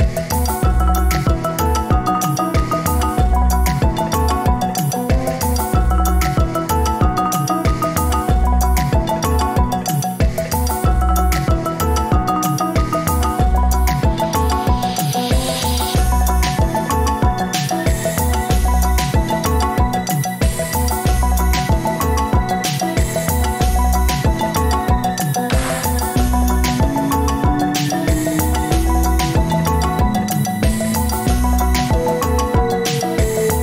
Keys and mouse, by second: 0.4 Tab, 1.4 Tab, 2.3-6.9 drag, 6.9-9.8 middle drag, 11.1-14.1 middle drag, 14.8-16.0 right drag, 16.3 Tab, 16.7-17.5 right drag, 18.0-20.6 middle drag, 20.9 click, 22.0-24.1 middle drag, 26.6 alt+shift+click, 27.9 alt+z, 29.3 alt+z, 31.9 click, 32.4 click, 33.4 middle click.